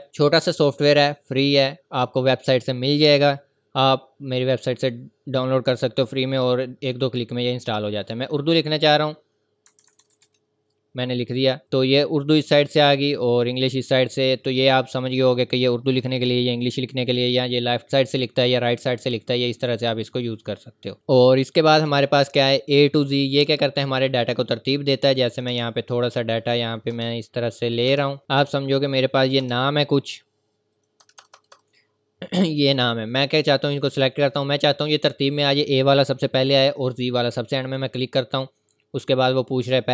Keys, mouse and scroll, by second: 8.3 click, 9.4-11.3 typing, 11.6 click, 19.5 scroll up 1, 25.3 click, 25.5 Return, 26.8 click, 26.9 Return, 27.7 click, 27.9 Return, 28.2 click, 28.4 Return, 29.2 click, 29.4 Return, 30.7 click, 31.0 Return, 32.1-32.9 scroll up 1, 33.1 click, 37.7 click.